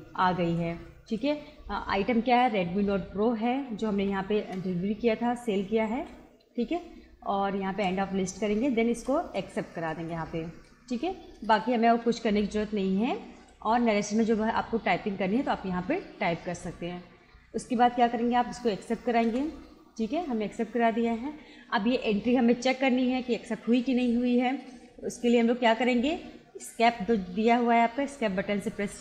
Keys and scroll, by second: 4.0 Return, 5.9 Return, 7.7 Return, 18.6 Return, 28.1 Escape.